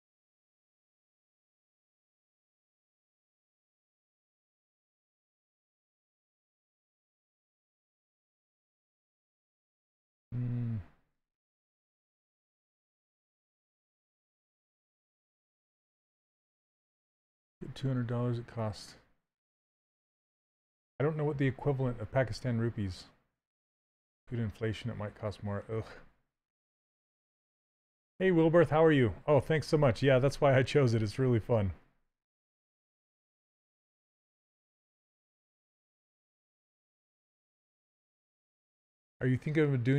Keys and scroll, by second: 9.2 ctrl+z.